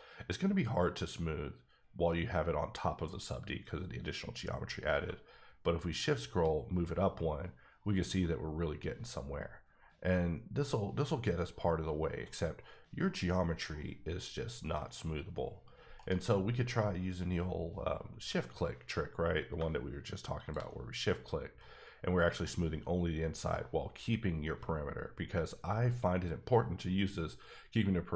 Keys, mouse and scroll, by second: 5.0-5.5 shift+scroll up 1, 5.5-6.4 scroll up 2, 6.5-7.3 scroll up 5, 7.3-7.7 scroll down 4, 7.7-8.1 scroll up 1, 8.5-9.7 scroll up 10, 9.7-11.5 scroll down 6, 11.5 scroll down 2, 11.7-12.5 scroll up 3, 12.5-13.7 scroll down 9, 13.7-15.3 scroll up 10, 15.3-16.0 scroll down 1, 16.0 right click, 18.1 q, 20.3 shift+click, 21.0-21.7 scroll up 6, 22.0-23.1 scroll up 2, 23.1-23.5 scroll up 4, 23.6-24.3 scroll down 7, 24.3-25.0 scroll up 1, 25.0-26.5 scroll up 9, 26.5 scroll up 1, 26.7-27.5 scroll down 8, 27.9-28.1 scroll up 7.